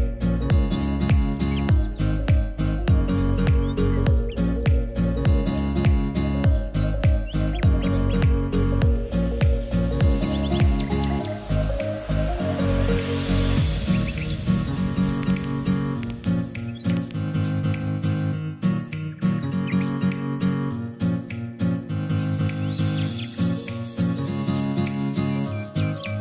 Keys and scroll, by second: 22.2 ctrl+z.